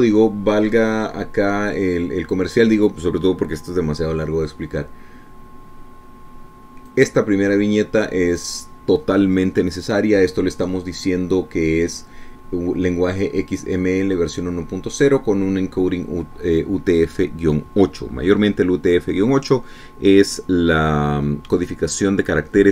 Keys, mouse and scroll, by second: 8.1-9.8 drag.